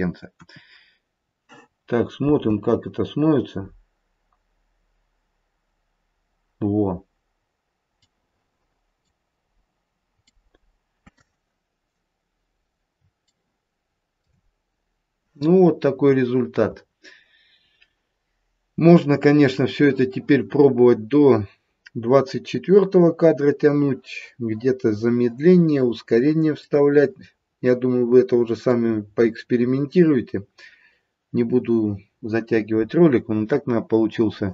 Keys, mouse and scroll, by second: 0.2 KP_1, 1.2-2.2 scroll down 1, 2.2-2.6 scroll down 2, 2.2 space, 3.3-4.3 scroll down 1, 7.4-8.1 scroll up 1, 8.2 middle click, 10.1 middle click, 13.2 shift+middle click, 14.5-16.2 scroll down 1, 21.3-23.3 scroll down 2, 26.8 middle click, 28.5 middle click, 28.9-29.3 scroll up 1, 30.2-32.0 scroll down 1.